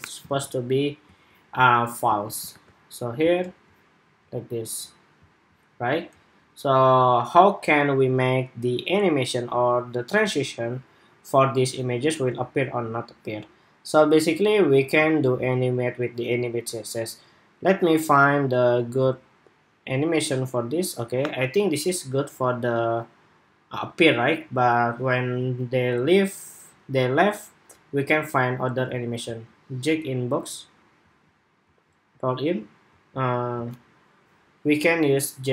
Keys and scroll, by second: 0.2 super+s, 2.3 super+r.